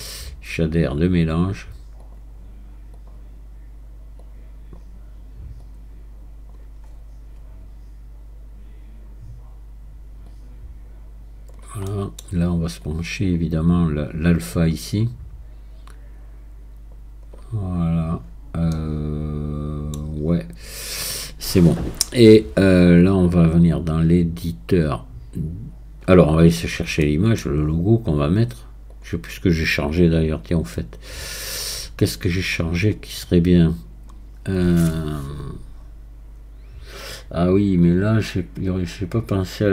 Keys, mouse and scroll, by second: 6.9 scroll up 4, 8.4-10.0 scroll up 1, 10.3-11.9 drag, 11.9 middle click, 12.8-14.6 drag, 17.7-18.7 scroll down 7, 18.7-21.7 middle drag, 23.4-26.6 drag, 26.6-27.0 scroll up 1, 27.0 middle click, 27.7-28.9 scroll up 4, 28.9-39.7 drag.